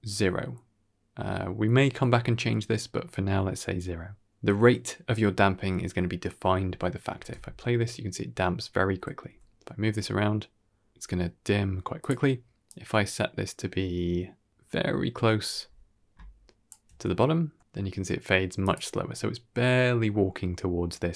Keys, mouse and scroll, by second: 7.1 shift+space, 8.8-9.1 scroll down 1, 9.1 g, 12.6-16.3 drag, 16.3 shift+middle click, 17.4 g.